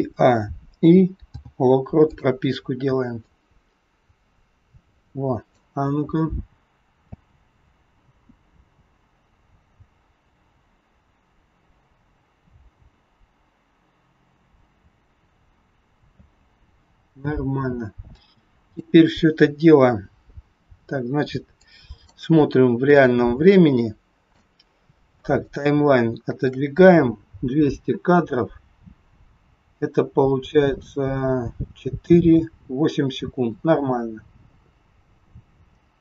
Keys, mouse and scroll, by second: 1.2 i, 3.2 click, 6.5 scroll down 3, 6.9 space, 16.2 space, 17.3-18.2 scroll down 2, 18.2 click, 21.5 click, 22.9 shift+middle click, 25.8 shift+middle click, 27.6 space.